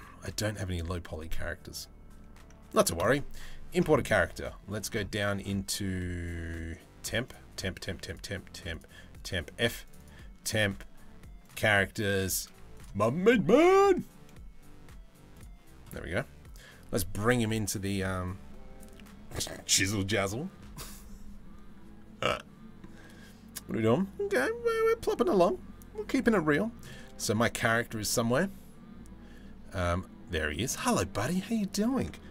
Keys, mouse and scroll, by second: 30.1 middle click.